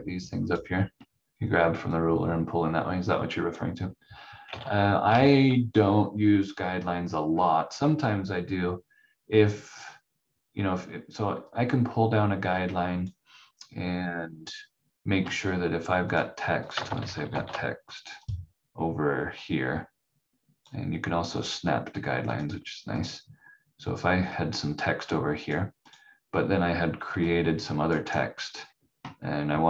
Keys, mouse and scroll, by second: 4.6 ctrl+z, 5.0 ctrl+z, 7.0 scroll up 1, 11.5 click, 14.3 scroll up 1, 16.1 click, 16.6-17.8 typing, 18.2 click, 27.9 right click, 28.4-29.6 scroll down 1.